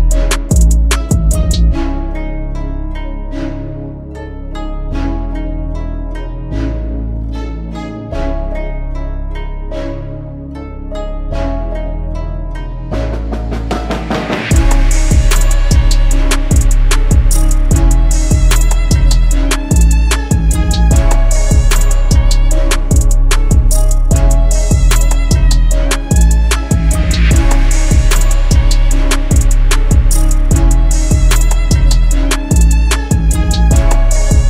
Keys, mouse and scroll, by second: 15.8 double click.